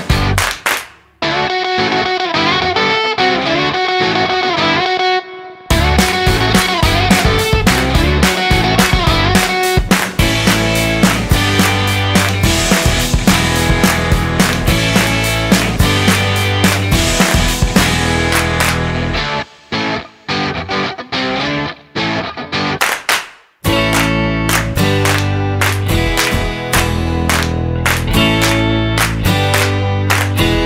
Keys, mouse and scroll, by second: 0.1 click, 0.7 click, 1.6 click, 2.0 middle click, 4.7 ctrl+shift+click, 6.7 ctrl+shift+click, 7.8 middle click, 10.2 click, 10.5 shift+a, 14.8 middle click, 15.5 click, 17.1 click, 20.7 middle click, 22.4 middle click, 24.8 middle click, 30.0 click.